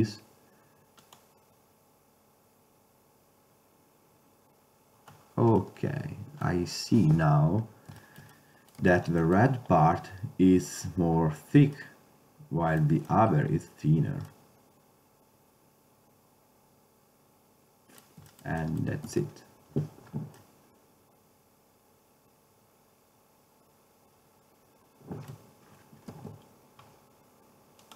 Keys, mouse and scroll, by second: 5.7-6.3 middle drag, 6.4-6.7 middle drag, 6.8 middle click, 7.6-8.2 middle drag, 11.0 middle click, 11.6 middle click, 15.1-16.0 middle drag, 18.7-19.8 middle drag, 19.8 ctrl+Tab, 26.7 ctrl+Tab.